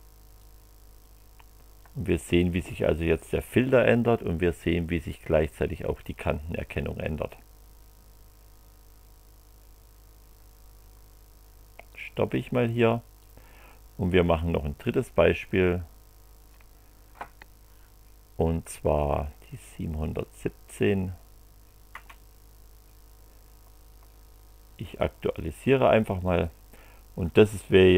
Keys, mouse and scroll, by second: 0.4 click, 11.9 click, 13.2 click, 15.3 click, 20.6 click, 21.9 Return, 25.0 click, 26.4 click.